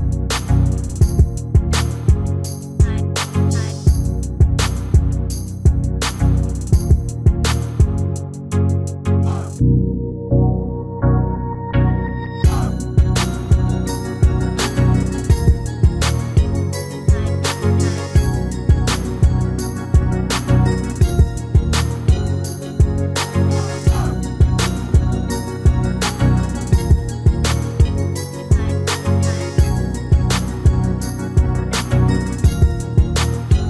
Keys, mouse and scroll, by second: 3.0-4.7 drag, 8.9-10.6 middle drag, 11.3-12.9 drag, 13.1-16.3 drag, 15.7-17.5 middle drag, 20.4-21.7 right drag, 20.5-22.4 drag, 21.7-23.7 middle drag, 23.3 KP_1, 24.2 KP_3, 26.6-29.4 middle drag, 30.2-31.8 right drag, 31.7 shift+d.